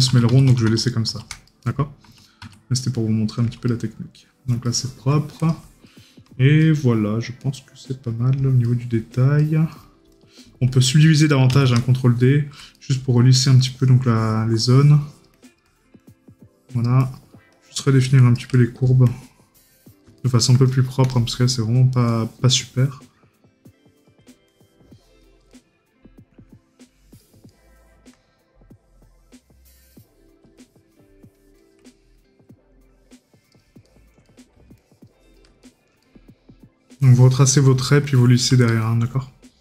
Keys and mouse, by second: 1.5 right click, 3.7 right click, 8.7 right click, 12.8 right click, 18.6 right click, 20.2 right click, 25.6 right click, 31.9 right click, 33.9 right click, 35.7 right click, 38.7 right click.